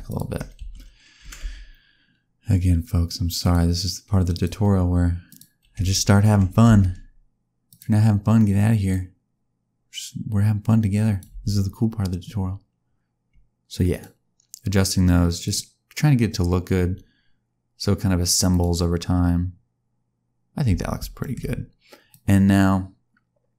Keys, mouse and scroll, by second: 0.0 shift+click, 0.5 a, 1.2 g, 4.3 click, 5.2 click, 5.7 a, 6.3 g, 8.9 click, 11.3 space, 13.9 click, 15.4 click, 16.2-17.4 scroll down 2, 18.5 click, 20.6 space, 21.2 shift+middle click, 22.1 click.